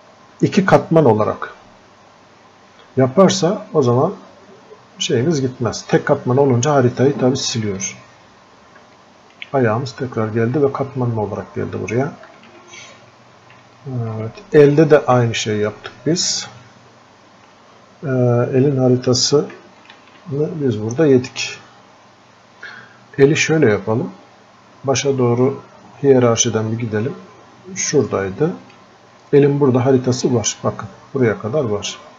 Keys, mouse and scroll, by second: 10.2 scroll up 1, 12.0-32.1 alt+drag.